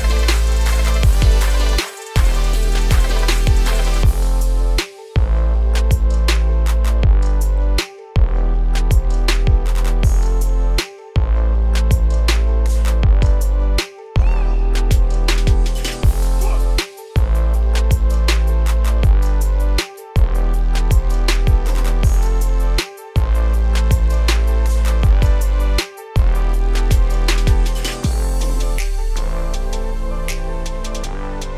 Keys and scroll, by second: 1.3 ctrl+space, 15.3 ctrl+space, 19.5 ctrl+z.